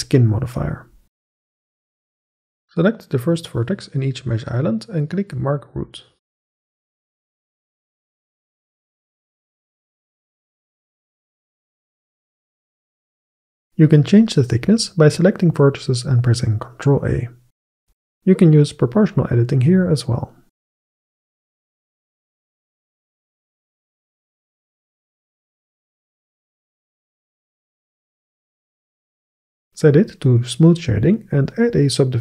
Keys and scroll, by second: 14.3 a, 17.0 ctrl+a, 18.6 ctrl+a, 21.1 ctrl+a, 22.0 ctrl+a, 22.7 ctrl+a, 26.5 Tab, 32.0 ctrl+2.